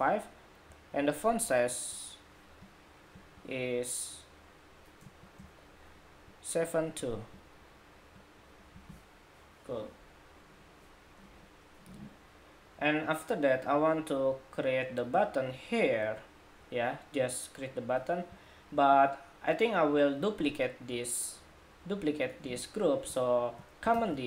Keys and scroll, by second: 23.8 super+d.